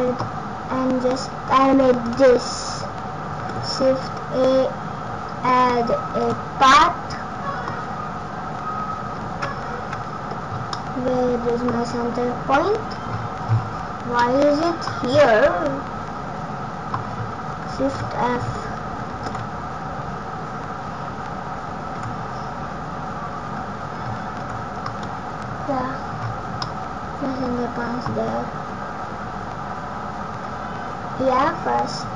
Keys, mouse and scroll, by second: 0.9-1.9 scroll up 3, 2.0 click, 3.3 shift+a, 6.6 middle click, 10.7 middle click, 11.7-12.1 scroll up 10, 13.0 scroll down 6, 13.5 scroll down 11, 14.1 middle click, 14.1-14.5 scroll down 4, 17.8 shift+f, 25.3-25.9 scroll up 12, 26.0-26.7 scroll down 10, 26.5 middle click.